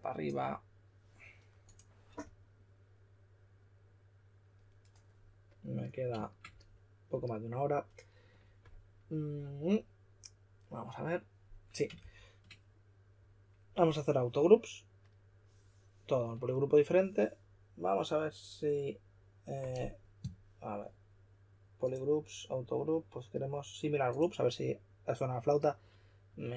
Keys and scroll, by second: 11.9 shift+f.